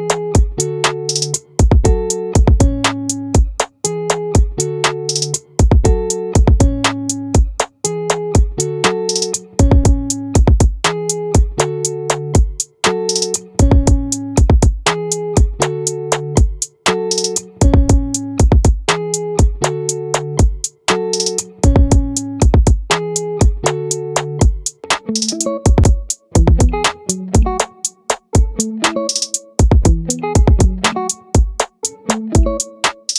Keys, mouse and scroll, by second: 10.4-16.4 drag, 11.8 right click, 15.0-16.0 right drag, 16.6-18.0 drag, 18.8 click, 20.4 ctrl+z, 21.0-22.2 drag, 23.4 click.